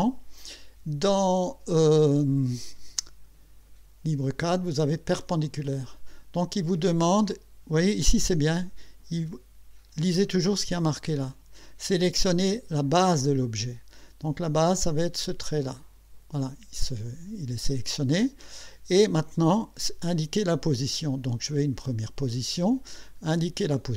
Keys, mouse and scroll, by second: 5.1 click, 15.8 click, 21.9 click.